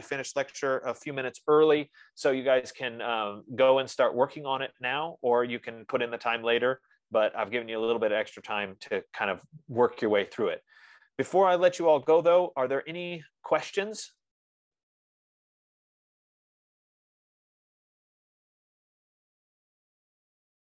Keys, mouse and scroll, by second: 8.6 F15.